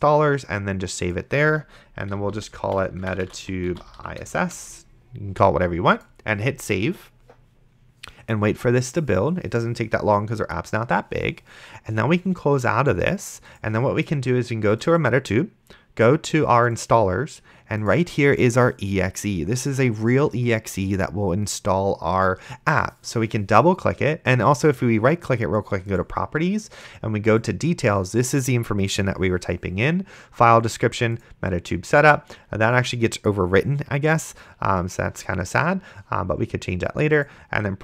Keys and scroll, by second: 2.1-4.3 typing.